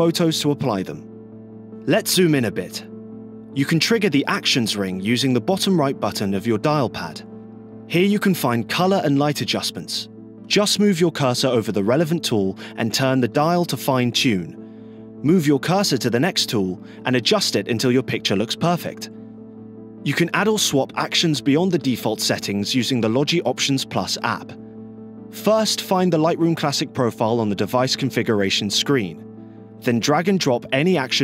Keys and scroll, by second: 1.9 scroll, 10.8 scroll, 16.0 scroll, 16.6-17.0 scroll, 17.4 scroll.